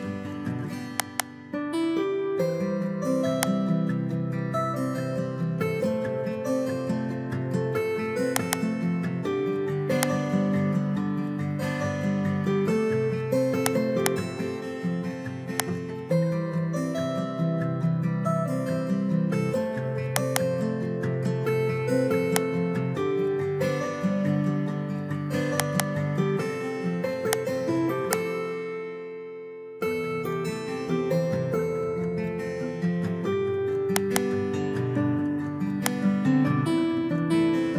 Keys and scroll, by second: 4.2 Return, 5.1 Up, 6.2 ctrl+v, 12.3 ctrl+x, 16.4 Return, 16.9 Up, 17.9 ctrl+v, 24.1 ctrl+x, 29.0 Return, 29.8 Up, 31.2 ctrl+v.